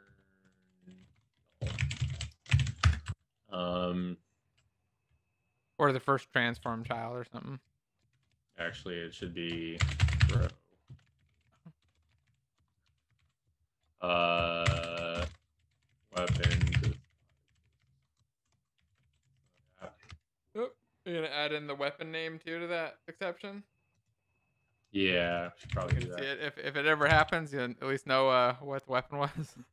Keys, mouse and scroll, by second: 0.0-1.5 typing, 2.0 alt+shift+f, 2.6 ctrl+s, 2.6 Down, 2.8 Escape, 3.0 Up, 8.1 shift+Home, 9.8-12.8 typing, 14.6-18.9 typing, 18.2 Right, 18.3 Right, 19.1 ctrl+s, 19.3 alt+shift+f, 19.6 ctrl+s, 19.6 Down, 20.0 Escape, 26.0 ctrl+s, 27.5 ctrl+s, 29.4 Left.